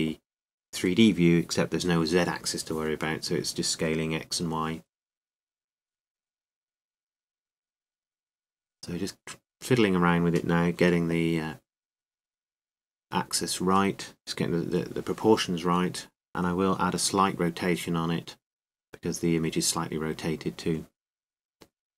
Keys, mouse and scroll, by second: 4.7 g, 8.5 g, 10.0 click, 10.0 s, 12.5-13.8 drag, 12.5 s, 15.3-16.6 drag, 15.3 g, 17.9 click, 17.9 r.